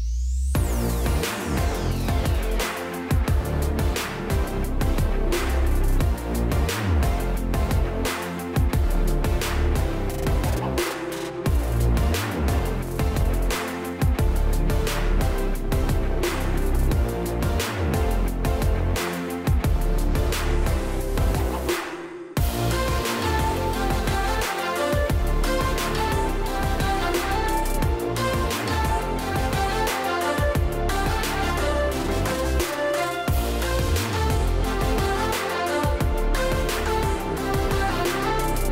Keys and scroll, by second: 1.5 space, 5.6 space, 9.0 space, 13.1 space, 20.8-21.5 space, 30.3 space, 30.9 space, 31.0 space, 33.6 space.